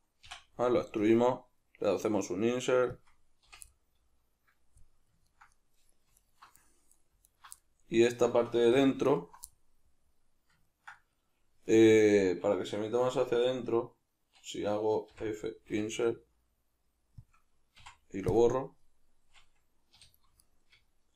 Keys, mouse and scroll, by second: 3.0 click, 3.5 o, 3.7-6.2 middle drag, 6.2 alt+right click, 7.3 alt+right click, 7.5 middle click, 8.0 alt+right click, 8.6 2, 9.0 alt+right click, 9.5-17.3 middle drag, 15.2 f, 17.3 click, 17.8 x, 18.8-20.4 middle drag, 20.0 2, 20.4 alt+right click.